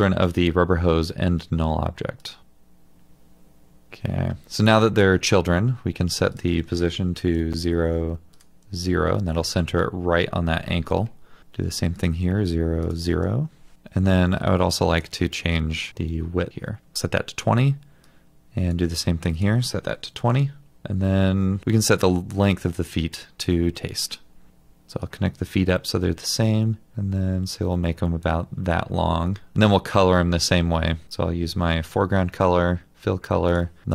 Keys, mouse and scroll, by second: 3.9 typing, 7.1 typing, 7.3 Return, 8.5 typing, 8.6 Return, 12.2-13.0 typing, 12.3 Return, 13.1 Return, 16.9 Return, 19.9-20.7 typing.